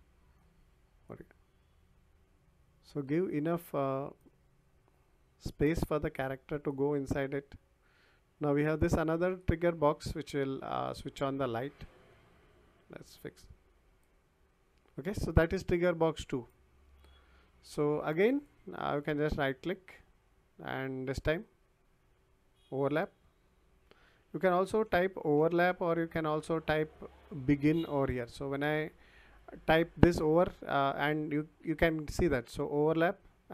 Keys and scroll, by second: 11.8 ctrl+z, 24.7-26.4 typing.